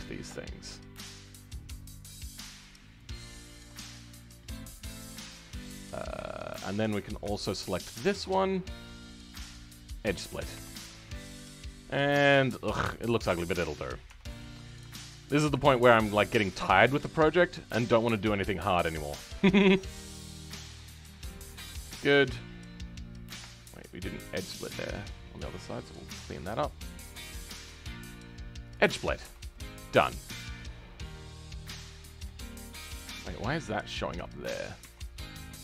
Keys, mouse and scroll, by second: 4.4-7.7 middle drag, 7.7 alt+shift+click, 8.4-10.0 middle drag, 10.0 right click, 10.2-10.5 scroll down 2, 10.5 Tab, 10.7-14.2 middle drag, 14.2-15.2 scroll up 1, 15.2 alt+click, 19.2 ctrl+click, 20.4 ctrl+click, 20.9-21.2 scroll up 1, 21.2-23.1 middle drag, 23.1 scroll up 2, 23.4-25.3 shift+middle drag, 25.3 ctrl+click, 26.2 ctrl+click, 28.7 right click, 28.9 scroll down 5, 29.1 Tab, 29.4-33.4 middle drag, 33.4-34.1 scroll up 2, 34.1 shift+middle click, 34.7 Tab, 35.2-35.6 middle drag.